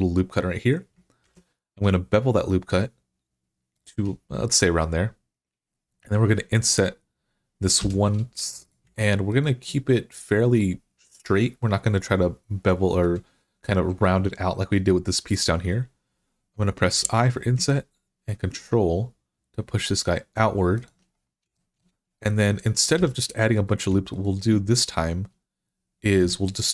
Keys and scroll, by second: 1.1 ctrl+b, 7.6 3, 16.7 i, 22.8 2.